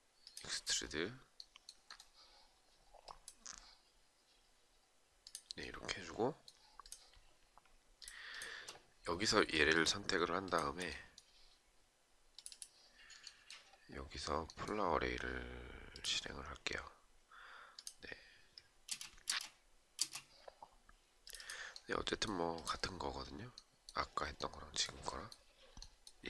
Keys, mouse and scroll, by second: 7.9 shift+click, 9.3 shift+click, 10.0 shift+click, 18.4 space.